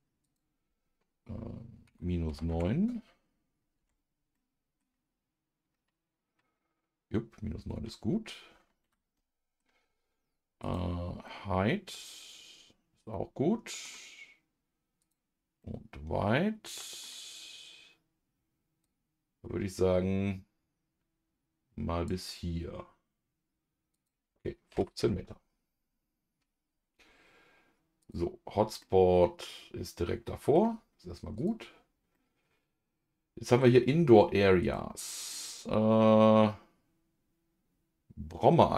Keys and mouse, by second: 0.2-9.1 drag, 9.1 middle click, 10.6 click, 11.2-13.8 middle drag, 15.0 click, 15.6-17.0 middle drag, 18.8-22.3 drag, 23.9-25.0 drag, 28.0 click, 28.8-30.5 middle drag, 31.3 click, 32.1-33.6 middle drag, 34.6 click, 35.3-38.7 middle drag.